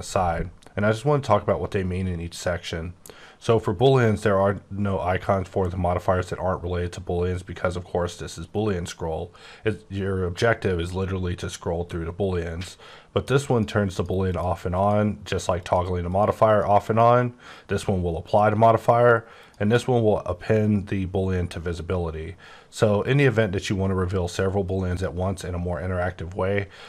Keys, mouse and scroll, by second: 8.4-9.0 scroll up 7, 9.0-9.6 scroll down 10, 9.6-13.4 scroll up 26, 13.4 click, 13.9 click, 14.3 click, 14.7 click, 15.2 click, 15.6 click, 16.1 click, 16.4 click, 16.8 click, 18.2 click, 19.3 click, 23.0 click, 24.9 click.